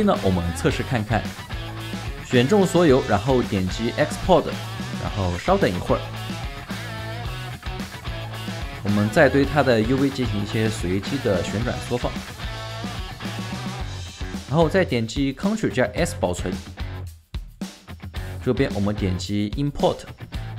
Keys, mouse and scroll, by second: 8.5 alt+right click, 9.9 4, 11.7 space, 13.0 right click, 14.1-15.1 scroll down 1, 15.6 scroll, 16.4 ctrl+s.